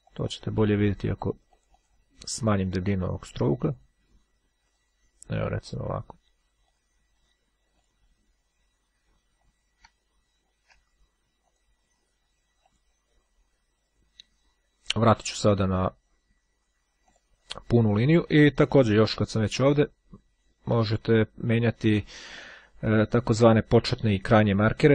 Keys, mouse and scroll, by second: 3.8 click, 4.8 click, 5.8-6.4 scroll down 1, 6.8 click, 8.0 click, 9.3 scroll down 1, 9.6-10.1 scroll up 1, 10.2-11.2 shift+scroll down 1, 11.6 click, 12.6 click, 15.0 click, 15.9-16.8 scroll up 1, 17.2 click, 21.5 click, 23.3-24.9 drag.